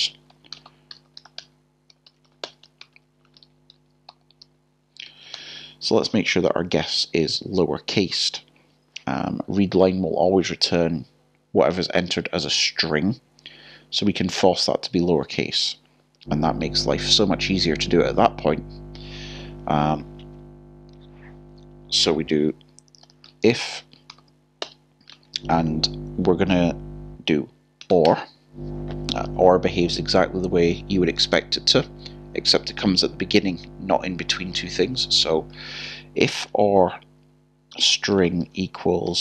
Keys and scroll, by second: 1.9 typing, 14.7 b, 15.2 j, 16.0 i, 23.8 BackSpace, 37.7 (, 39.1 typing.